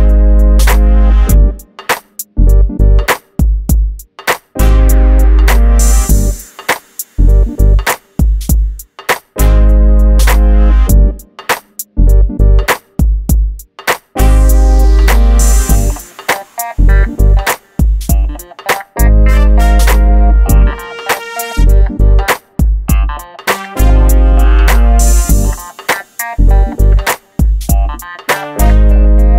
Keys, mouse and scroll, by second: 0.4 click, 18.2-18.6 scroll up 1, 18.8 Escape, 21.4 ctrl+z, 21.7 scroll down 1, 22.3-22.9 scroll up 1, 22.9 click, 25.1 shift+click, 26.3 click, 27.3 shift+middle click, 27.5-28.1 scroll down 1, 28.1 scroll up 1, 28.5 shift+middle click, 29.2-29.3 scroll up 1.